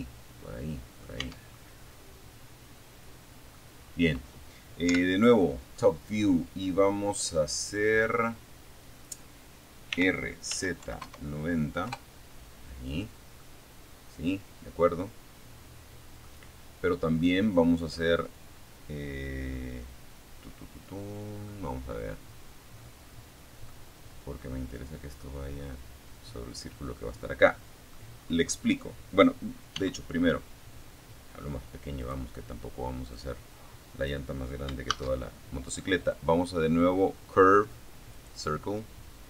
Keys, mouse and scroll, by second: 0.9-1.9 middle drag, 2.0 scroll down 2, 3.1 KP_7, 3.9-4.3 scroll up 2, 8.1 r, 8.7 z, 9.0 KP_9, 9.2 KP_0, 10.1 KP_Enter, 11.6-14.6 middle drag, 15.4 middle click, 19.7-21.9 middle drag, 25.3-25.7 scroll down 2, 26.3-26.7 scroll up 2, 26.8 scroll down 2, 27.9 s, 30.2 click, 31.3-32.5 drag, 33.1 shift+a, 36.3 click.